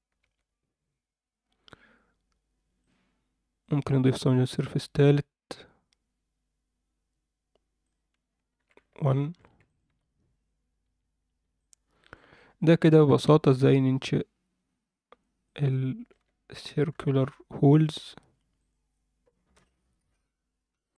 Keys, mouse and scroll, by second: 0.2 Tab, 2.8 click, 3.6-6.3 drag, 7.8 click, 8.6 alt+a, 8.9 alt+middle click, 9.7 click, 10.1 Tab, 11.0 Tab, 11.2-11.6 scroll down 2, 11.6-12.1 alt+middle drag, 12.3 alt+middle drag, 12.9 middle drag, 13.5-15.2 alt+middle drag, 15.4-16.1 alt+middle drag, 16.9 KP_7, 18.7 click.